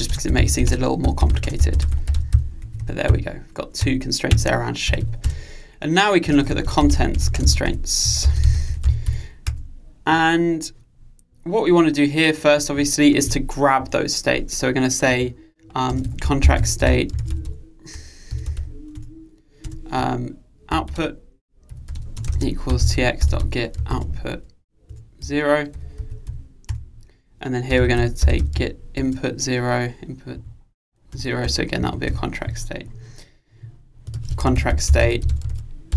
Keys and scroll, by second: 19.0 Return, 25.0 Return, 31.2 Return.